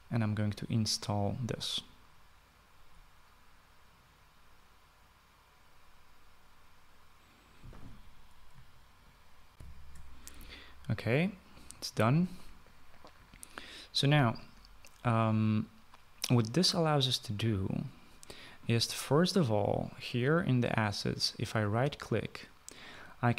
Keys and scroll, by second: 9.6 shift+F9, 10.0 shift+F9.